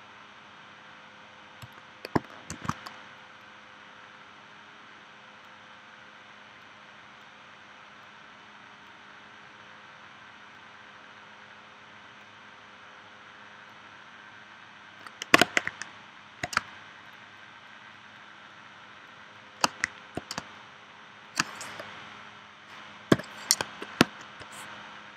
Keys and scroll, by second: 2.5 shift+c, 16.6 space, 20.4 space, 23.1 p.